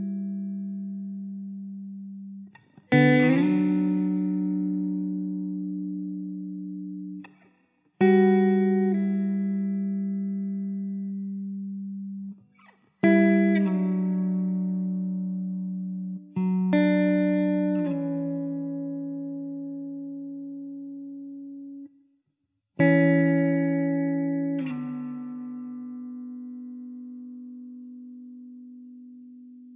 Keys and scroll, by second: 0.6 Tab, 7.9 ctrl+z, 14.9 s, 19.1 Tab, 24.7 shift+d, 25.3 r, 28.9 shift+d.